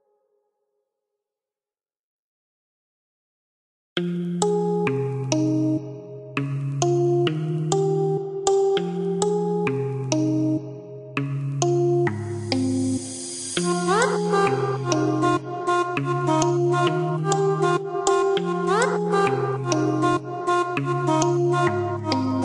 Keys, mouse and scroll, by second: 5.1 click, 7.1 click, 8.1 click, 9.7 KP_0, 9.9 KP_Decimal, 10.2 KP_2, 10.7 KP_Enter, 11.4 KP_Enter, 11.6 Escape, 13.3 ctrl+click, 15.3 click, 16.0 click, 18.9 click, 19.7 KP_3, 20.0 KP_Enter, 20.8 KP_Enter.